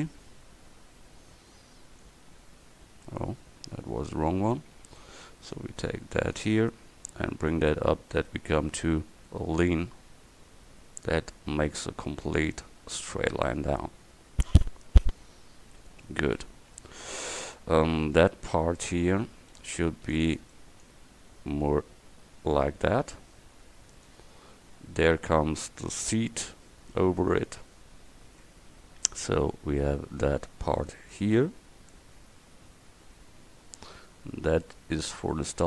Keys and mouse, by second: 4.2 ctrl+z, 4.8 a, 5.4 c, 8.9-11.1 drag, 15.9 click, 16.3 middle click, 16.9 middle click, 17.6 Tab, 18.0 a, 18.6 Tab, 19.3 a, 19.7 c, 20.9-22.8 drag, 28.5 Tab, 31.6-34.0 drag.